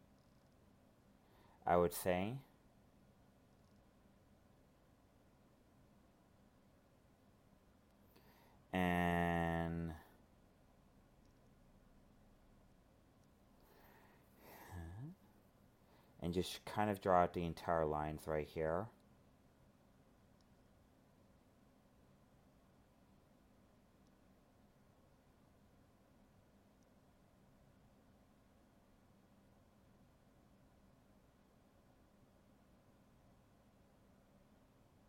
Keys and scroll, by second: 6.9 alt+space, 8.6 alt+space, 10.0 alt+space, 23.8 alt+space, 27.0 ctrl+z.